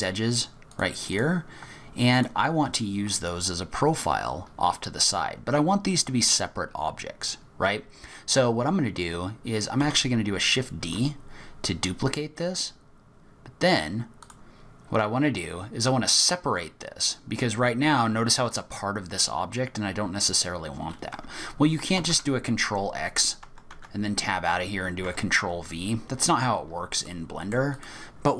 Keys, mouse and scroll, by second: 0.3 shift+click, 0.7 shift+click, 1.1 shift+click, 2.1 shift+click, 2.6-4.2 shift+scroll down 3, 4.2-5.3 scroll down 10, 5.4-5.9 scroll up 3, 7.0-8.1 scroll up 4, 8.5-9.6 scroll up 5, 9.8 shift+d, 17.1-17.9 scroll down 6, 17.9-19.2 scroll up 3, 19.2-19.8 scroll down 1, 19.8-20.1 scroll down 1, 22.0 ctrl+x, 23.7 Tab, 25.0 Tab, 25.6 click, 26.8 scroll up 2, 27.0 middle click, 27.7 click.